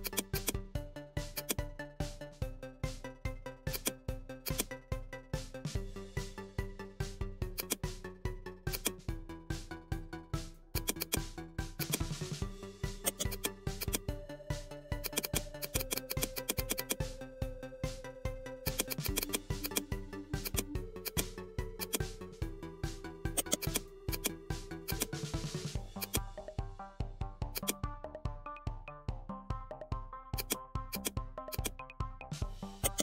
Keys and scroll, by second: 32.2 ctrl+z.